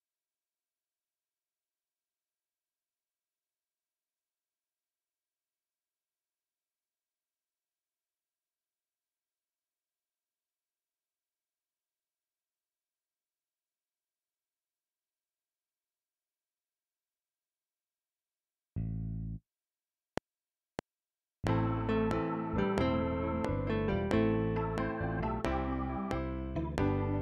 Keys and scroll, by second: 20.0 F7.